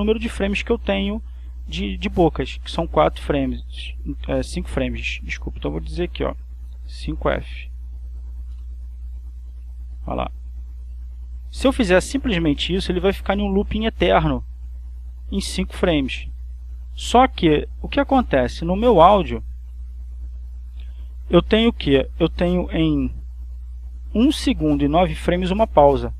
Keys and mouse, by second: 2.7 click, 6.9 5, 7.3 f, 8.9 Return, 10.0-18.3 drag, 19.9 click, 20.7 click, 23.5 click.